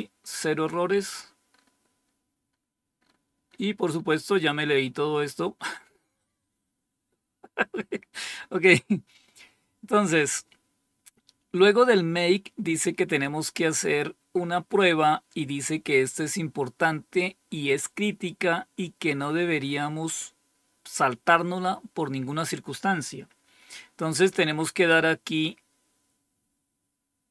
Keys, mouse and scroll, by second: 0.9-1.5 scroll up 2, 2.0-4.0 scroll up 10, 4.4-4.8 scroll up 2, 4.8-10.8 scroll down 12, 10.8-11.6 scroll up 2, 25.8-27.0 scroll down 2, 27.0-27.3 scroll down 1.